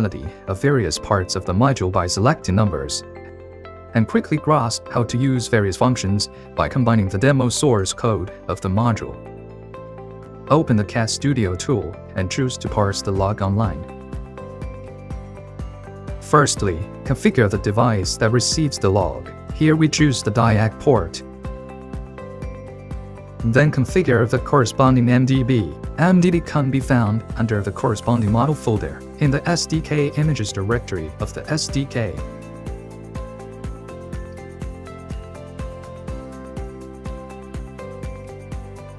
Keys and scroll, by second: 0.0-0.9 typing, 1.1 Return, 2.4 Return, 3.1 1, 3.2 Return, 3.9 2, 4.9 Return, 6.4-7.2 typing.